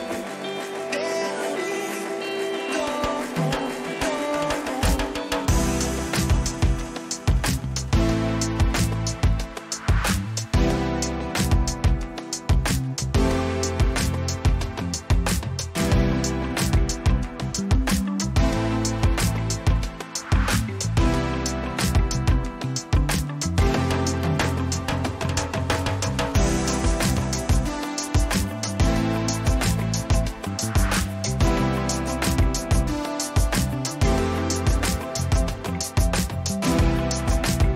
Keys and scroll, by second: 0.4 ctrl+j, 2.0 ctrl+alt+z, 2.9 ctrl+t, 3.6 Return, 5.3 Return, 10.5 ctrl+j, 10.9 ctrl+t, 20.9 Return, 21.9 ctrl+j, 22.3 ctrl+t, 26.1 Return, 31.7 ctrl+t, 33.2 ctrl+-.